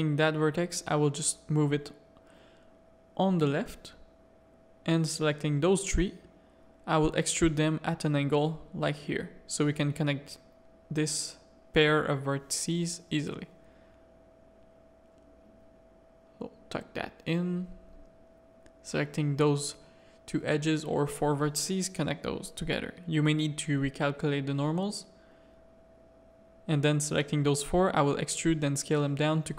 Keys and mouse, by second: 0.1 click, 0.9 a, 1.2-2.2 middle drag, 2.9 click, 4.3 ctrl+click, 5.4 ctrl+KP_1, 6.5 e, 8.8 a, 10.9 g, 13.2 KP_3, 14.8-16.9 drag, 17.0 a, 17.3 middle click, 18.1 2, 18.3 click, 18.6 1, 18.7 middle click, 21.1 f, 21.4 a, 21.7 middle click, 22.3 click, 22.7 middle click, 23.5 click, 24.1 Tab, 24.3 middle click, 24.9 Tab, 25.0 a, 25.3 middle click, 26.5 middle click, 27.3 e, 27.7 s.